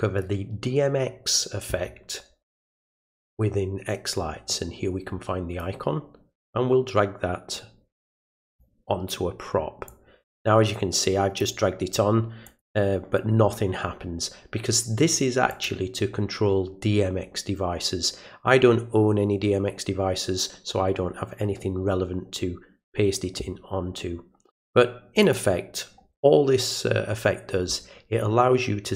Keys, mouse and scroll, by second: 5.6-8.6 drag, 9.9-11.4 drag, 12.5 click, 15.5 click, 25.2 click.